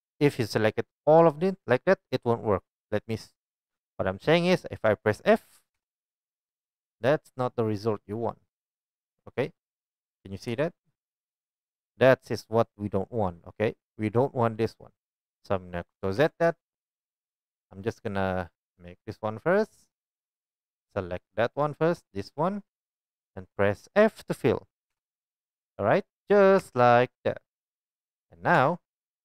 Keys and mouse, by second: 5.8 f, 10.5 KP_1, 16.2 ctrl+z, 20.0-25.7 middle drag, 24.9 f, 25.7 click, 26.3-29.2 middle drag, 26.6 Tab, 28.5 Tab.